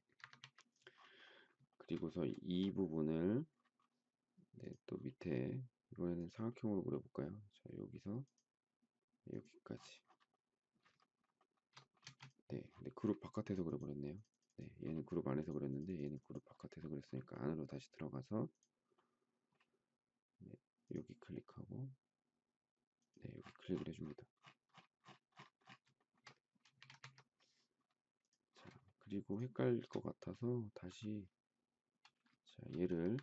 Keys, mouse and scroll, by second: 0.2 Escape, 0.4 Escape, 1.7 shift+middle click, 2.3 shift+middle click, 10.9 shift+middle click, 11.4 shift+middle click, 11.5 shift+double middle click, 12.0 space, 25.9 shift+middle click, 26.7 space, 26.8 Escape, 27.0 Escape, 28.8 shift+middle click, 29.3 shift+click, 29.3 shift+double click, 29.6 shift+middle click, 30.8 m, 32.4 shift+middle click, 33.1 Escape.